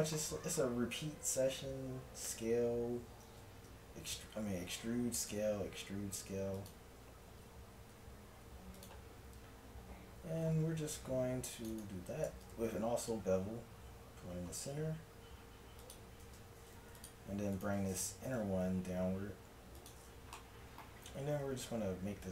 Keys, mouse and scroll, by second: 0.2-2.3 middle drag, 2.3 s, 7.4 a, 8.0 ctrl+Tab, 10.4 ctrl+r, 12.3 ctrl+b, 16.2 ctrl+Tab, 17.6 click, 18.3 g, 20.3-22.3 drag, 21.4 ctrl+r.